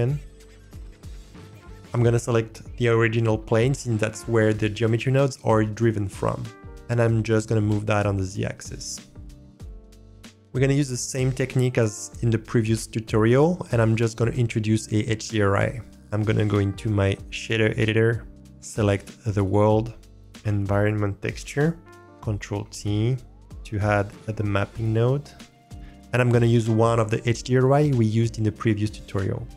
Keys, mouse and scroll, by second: 1.1 click, 6.9-7.4 middle drag, 8.2-9.0 drag, 16.4-17.8 drag, 19.1 click, 22.0 click, 22.5 ctrl+t, 23.9-24.2 scroll down 1.